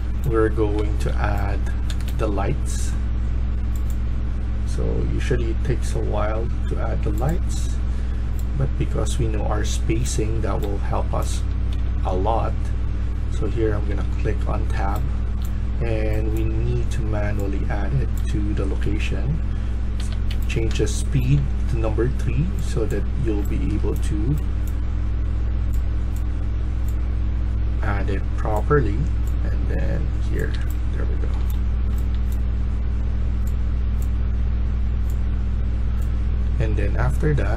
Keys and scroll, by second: 0.0-2.4 typing, 10.2-11.7 typing, 13.3 Tab, 13.5-15.4 typing, 18.1-21.2 typing, 23.3-24.2 a, 30.4-31.4 d, 31.9 d.